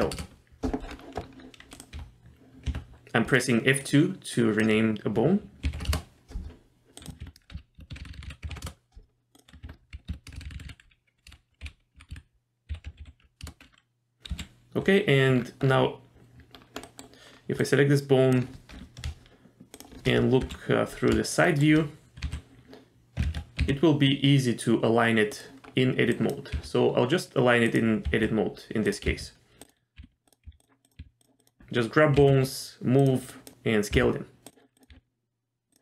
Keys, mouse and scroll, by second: 0.9-1.2 scroll up 2, 1.7 click, 2.7 F2, 7.0 click, 7.2 F2, 8.0 BackSpace, 8.3 BackSpace, 9.3 click, 9.6 F2, 10.4 BackSpace, 10.5 BackSpace, 10.7 BackSpace, 12.1 BackSpace, 14.3 KP_3, 15.3-15.7 scroll down 3, 16.5-16.8 scroll up 1, 16.8 middle click, 17.2 scroll up 1, 17.6 click, 19.7 shift+click, 20.4 KP_3, 21.4 shift+middle click, 22.2 h, 23.2 ctrl+z, 23.6 g, 25.6-26.1 scroll up 2, 26.1 click, 26.5 g, 28.0 s, 29.1 g, 30.0 g, 30.5 s, 30.8 click, 31.0 g, 31.4 click, 32.2 g, 33.3 click, 33.9 g, 34.7 click, 34.9 g.